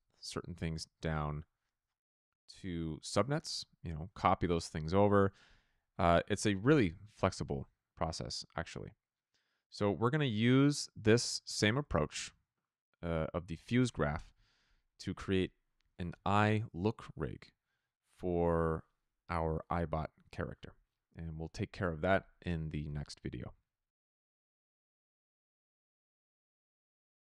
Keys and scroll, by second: 7.3 f.